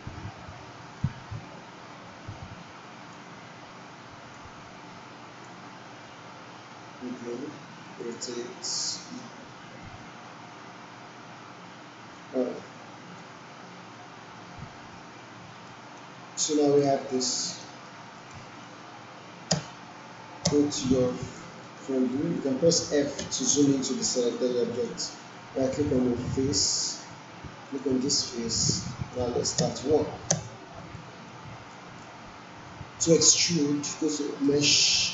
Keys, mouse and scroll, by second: 4.3-5.6 drag, 12.8-13.4 alt+drag, 15.7 alt+right click, 16.5 alt+middle click, 16.8-17.9 alt+right click, 17.3 alt+right click, 18.0 alt+middle click, 18.3-19.0 alt+right drag, 19.5 space, 20.9 space, 21.1 alt+click, 21.6 alt+middle click, 22.1 alt+right click, 23.2 f, 24.2-25.1 alt+click, 25.4-26.9 right drag, 27.6 click, 28.2-29.4 alt+drag, 29.5 space, 30.9-31.5 alt+right click, 31.6 alt+middle click.